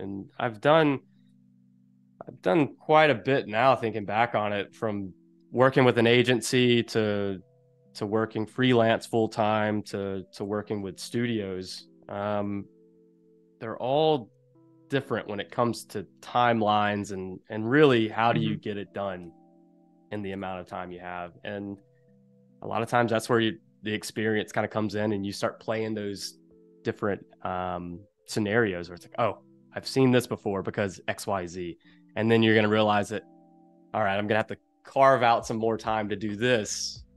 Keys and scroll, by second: 1.5 space, 3.8 space, 10.4 super+g, 13.3 super+g, 14.7 shift+super+[, 17.8 shift+super+[, 20.2 shift+super+[, 21.1 space, 30.5 a.